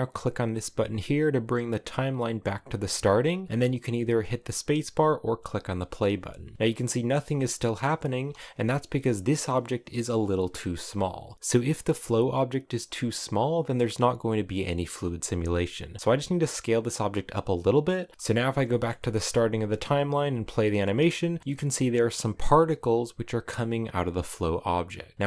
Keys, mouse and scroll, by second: 6.6 middle click, 7.4-7.8 scroll up 2, 7.8 space, 8.9 right click, 10.7-11.1 scroll down 1, 11.2 s, 11.3-16.0 shift+middle drag, 16.0 s, 17.5 click, 18.1 scroll down 2, 18.3-19.9 shift+middle drag, 19.9 space, 21.4-24.7 drag, 24.7 space, 24.9 click.